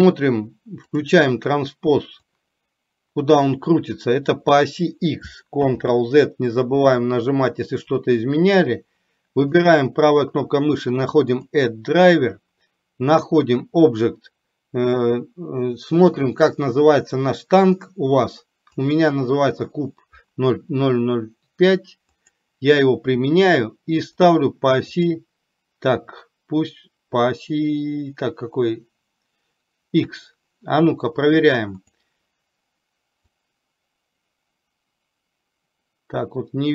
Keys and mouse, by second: 1.0 click, 2.5-4.5 drag, 5.7 ctrl+z, 33.4-36.7 drag.